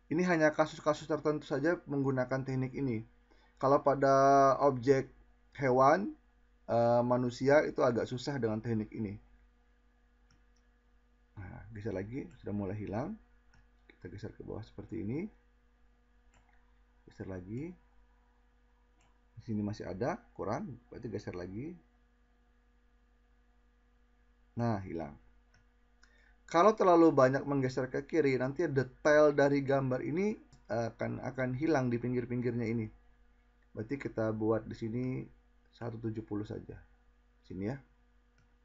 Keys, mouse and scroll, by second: 17.4-18.0 drag, 21.0 click, 22.4-24.8 drag.